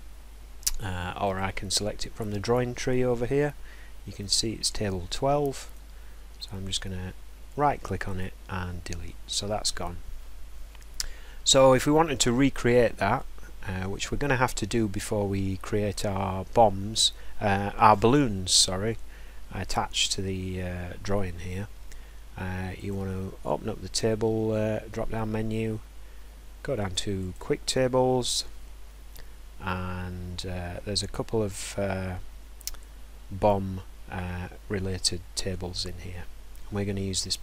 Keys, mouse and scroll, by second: 1.4 click, 2.3 click, 5.7 right click, 8.2 click, 22.9 click, 27.3 click.